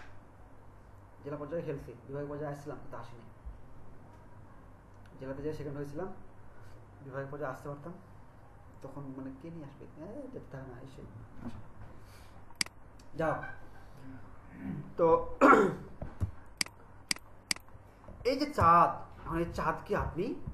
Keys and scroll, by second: 16.3 ctrl+space.